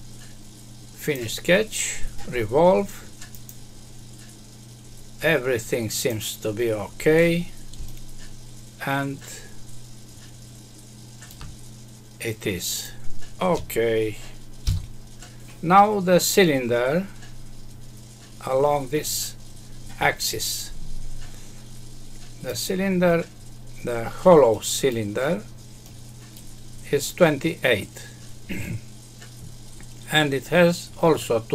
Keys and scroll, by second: 14.6 F6.